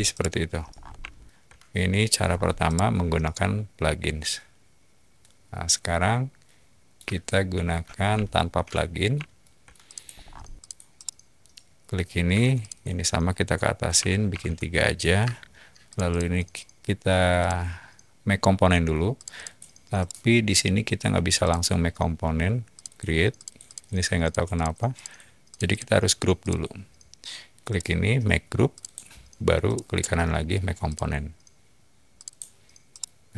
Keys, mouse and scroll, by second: 0.1 middle click, 0.6 scroll down 2, 1.1 shift+middle click, 2.2 scroll down 2, 2.6-6.8 middle drag, 7.1 shift+middle click, 7.8 scroll down 2, 8.2-9.0 shift+middle drag, 9.3 shift+middle drag, 9.8 click, 10.1 middle drag, 10.1 scroll up 2, 10.5 click, 10.9-11.3 middle drag, 10.9-11.3 scroll up 2, 12.3 p, 12.6 click, 13.9 3, 14.3 Return, 15.2 space, 15.9 click, 16.1 click, 17.4 click, 19.1 click, 19.3 click, 19.9 right click, 21.4 click, 22.7 click, 23.3 click, 23.6 click, 24.2 click, 24.5 click, 24.9 click, 25.5 click, 25.7 click, 26.4 click, 27.7 right click, 28.7 click, 29.6 right click, 30.8 click, 32.1 click, 32.9-33.3 middle drag.